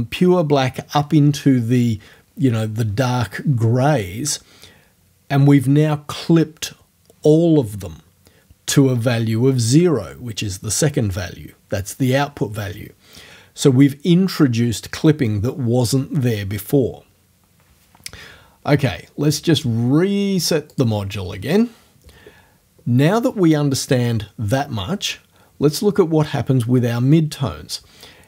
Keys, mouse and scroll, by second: 20.7 click.